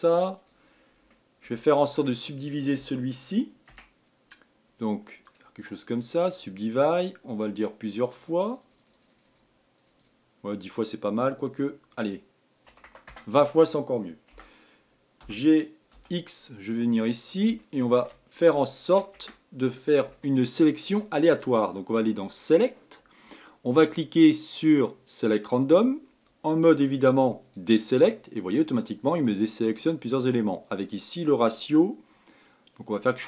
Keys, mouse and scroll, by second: 1.3-1.6 scroll down 1, 1.6-4.2 middle drag, 4.2 Tab, 5.8-8.4 right drag, 8.4-14.8 drag, 14.8 Tab, 15.8 g, 17.5 scroll up 3, 18.1-18.8 shift+middle drag, 18.8-19.2 scroll down 2, 19.2-19.7 shift+middle drag, 19.7 Tab, 20.6-22.8 middle drag, 22.8-25.8 drag, 27.1-28.9 drag, 28.9-31.2 middle drag, 31.2-33.2 drag.